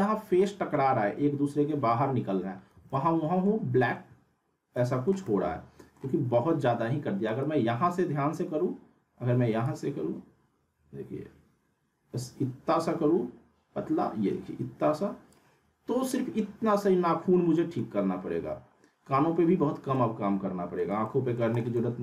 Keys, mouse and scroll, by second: 0.4-1.0 alt+middle click, 0.9 scroll up 1, 2.7 z, 2.9-3.5 alt+middle click, 3.6-4.1 scroll up 1, 4.9-6.2 alt+middle drag, 7.2 right click, 9.6-15.6 drag, 17.2 scroll down 1, 17.5 middle click, 18.0 scroll up 1, 19.9-20.9 alt+middle drag.